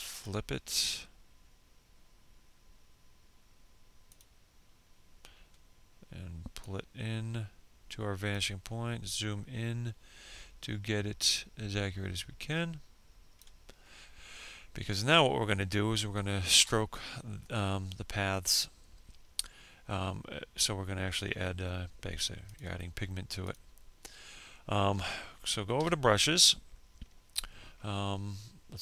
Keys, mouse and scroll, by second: 0.0 click, 2.5 click, 5.0 ctrl+click, 7.0 scroll up 1, 9.6-11.8 ctrl+drag, 12.0 scroll down 1, 20.7 click, 24.0 b, 27.7 F5.